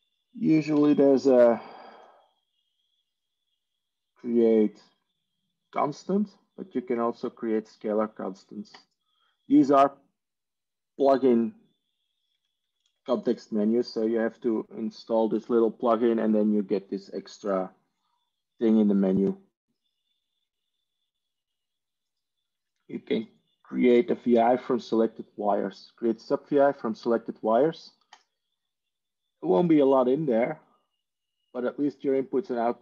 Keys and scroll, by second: 0.9 Tab, 12.5 Tab, 30.2 ctrl+e.